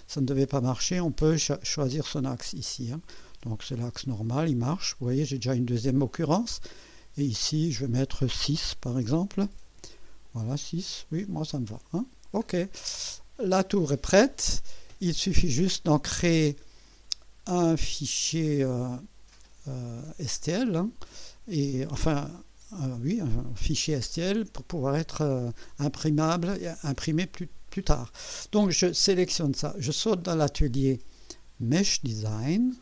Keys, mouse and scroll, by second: 1.7 click, 3.6 click, 4.8-5.4 drag, 7.5 click, 8.7 6, 9.0 Return, 10.3-12.1 drag, 12.4-12.8 scroll down 1, 13.1-15.0 drag, 16.7 scroll down 1, 17.6 right click, 18.8 click, 20.5 scroll up 2, 21.9-22.6 right drag, 29.2 click, 30.2 click, 32.0 click.